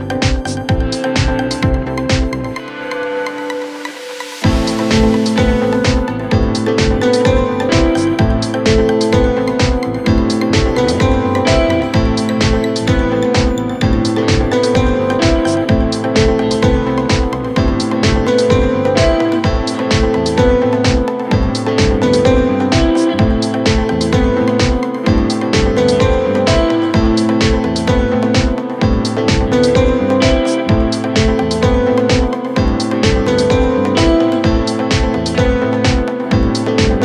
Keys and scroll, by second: 11.4 F3, 17.6 F3, 29.8 F3, 30.7 c, 31.7 F3, 32.5 Escape.